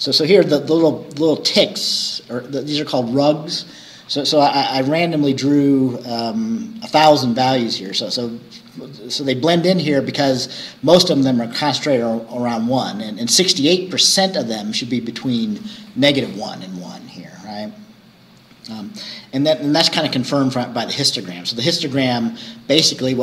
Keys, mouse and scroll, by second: 4.5-5.2 scroll up 4, 7.2-7.9 scroll down 4, 8.3 scroll up 2, 17.6-17.9 scroll up 2.